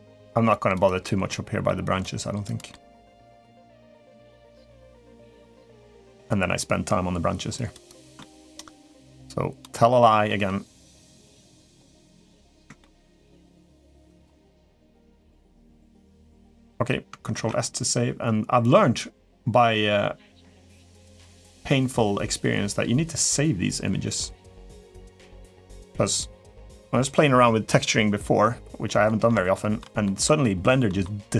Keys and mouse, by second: 0.3 click, 0.6 click, 1.1 middle click, 1.8 click, 2.3 click, 2.5 middle click, 3.0 click, 3.4 click, 3.8 click, 4.2 click, 4.7 click, 5.4 middle click, 6.0 click, 7.3 click, 7.6 click, 7.9 shift+middle click, 8.3 middle click, 8.8 click, 9.6 middle click, 10.0 middle click, 10.7 click, 11.9 middle click, 12.6 shift+middle click, 12.9 click, 13.4 click, 13.8 click, 14.2 middle click, 14.9 click, 15.1 click, 15.8 click, 16.5 middle click, 17.1 ctrl+s, 20.8-23.1 drag, 28.8 middle click, 29.3 shift+middle click, 29.8 middle click, 30.6 middle click.